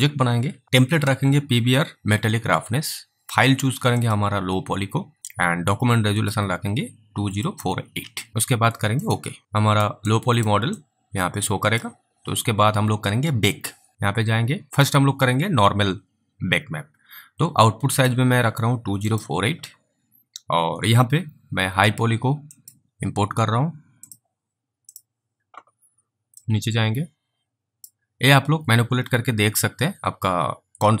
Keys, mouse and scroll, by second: 4.0 click, 9.5 alt+click, 10.3 alt+right click, 11.0 alt+click, 13.9 alt+click, 14.7 click, 18.0 click, 26.7 click.